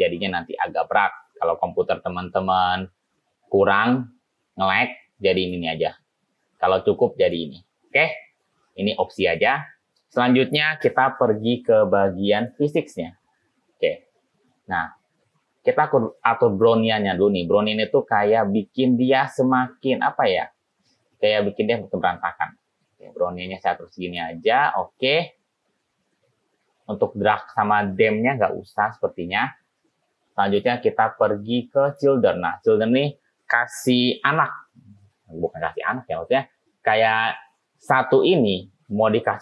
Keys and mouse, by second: 5.5 click, 7.3 click, 9.4 click, 12.5 click, 16.8 click, 19.6 click, 20.2 click, 21.7-22.8 drag, 23.2 click, 23.6 click, 30.8 click, 32.0 click, 37.7 middle click.